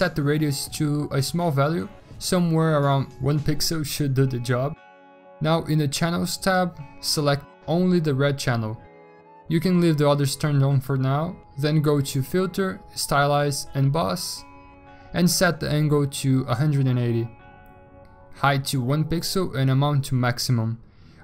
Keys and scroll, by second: 1.8 1, 16.3-17.8 typing, 18.9-19.6 typing.